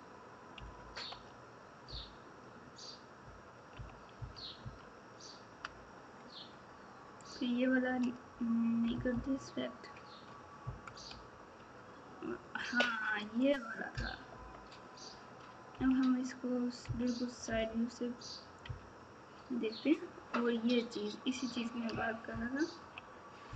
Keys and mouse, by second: 0.5 KP_Subtract, 1.8 KP_8, 4.1 KP_6, 8.9 KP_4, 11.0 f, 13.2 click, 14.3 KP_8, 15.7 KP_1, 16.8 KP_3, 17.5 KP_Divide, 22.2 ctrl+KP_2, 22.8 ctrl+KP_2, 23.4 ctrl+KP_6.